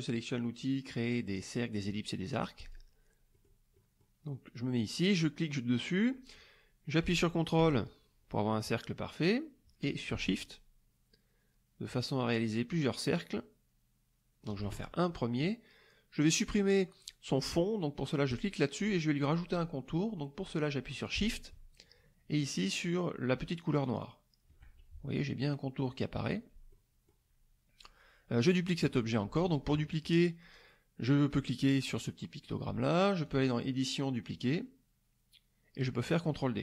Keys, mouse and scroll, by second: 2.6 click, 3.3 middle click, 3.7 middle click, 5.2-14.6 drag, 18.3 click, 23.8 shift+click, 26.7 middle click, 33.3 click.